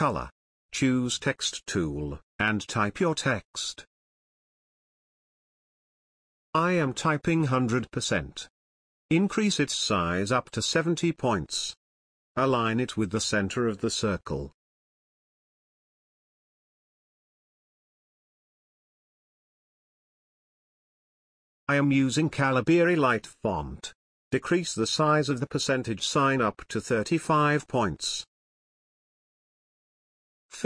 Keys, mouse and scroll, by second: 0.2 shift+click, 2.0 click, 2.3 t, 2.6-5.1 drag, 4.1 click, 7.5 click, 7.7 shift+5, 8.6 click, 10.0-11.6 drag, 12.0-17.3 drag, 14.4-16.4 drag, 18.2-19.9 typing, 22.0-30.6 drag, 25.3 click, 27.8 click.